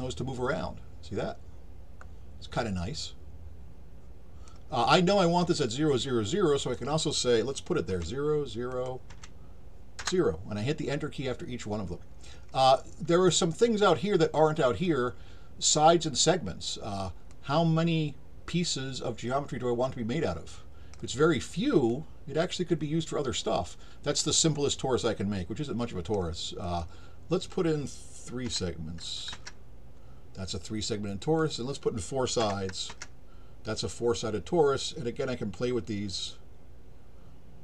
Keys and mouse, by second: 6.6 click, 8.7 click, 17.3-20.9 drag, 21.9-26.1 drag, 26.6 click, 31.4 click, 35.9-37.6 drag.